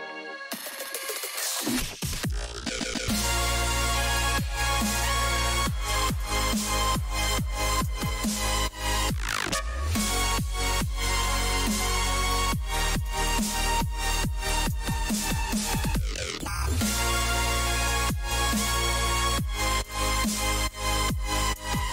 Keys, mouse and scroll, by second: 5.0 a, 6.2-15.0 middle drag, 16.8-21.9 middle drag.